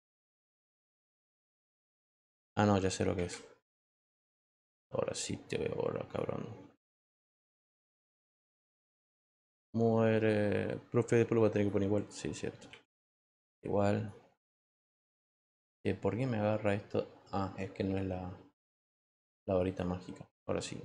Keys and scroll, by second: 0.3 w, 4.6 e.